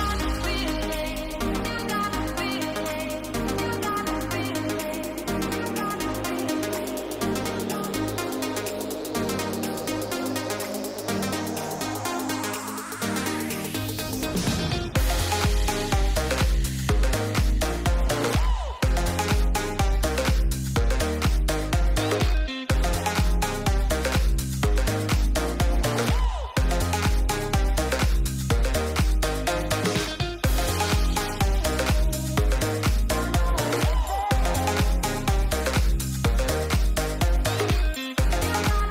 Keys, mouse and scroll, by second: 0.3 click, 1.1 shift+middle click, 1.6 shift+middle click, 2.0 click, 3.4 click, 5.3 click, 6.8-10.4 drag, 12.5 click, 18.5 click, 20.4 middle click, 20.8 shift+middle click, 22.3 shift+middle click, 22.5 middle click, 22.9 shift+middle click, 26.5 middle click, 28.3-30.3 drag, 31.3 click, 33.7 click, 34.4 click, 36.2 shift+middle click, 37.4 click, 38.7 ctrl+z.